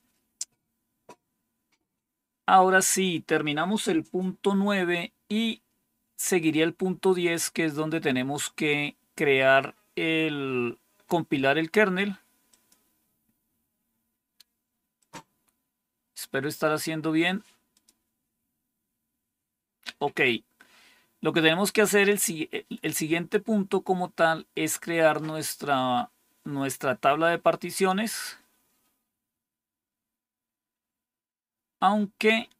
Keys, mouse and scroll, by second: 0.2 click, 12.4 click, 14.9 click, 17.6 click, 27.5-28.6 scroll down 3, 28.6-29.6 scroll down 2, 29.6-29.9 scroll down 1.